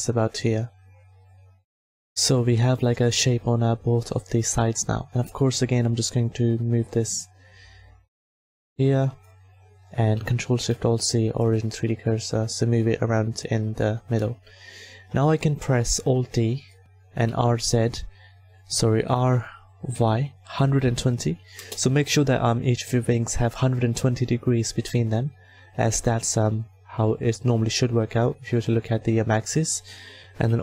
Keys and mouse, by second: 1.8 Tab, 3.3 a, 16.0 alt+d, 17.0 r, 19.1 r.